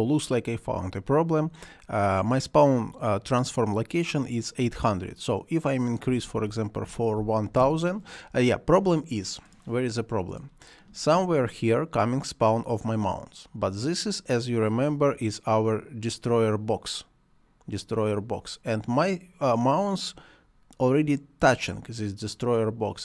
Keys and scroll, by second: 6.1 1, 7.6 Return.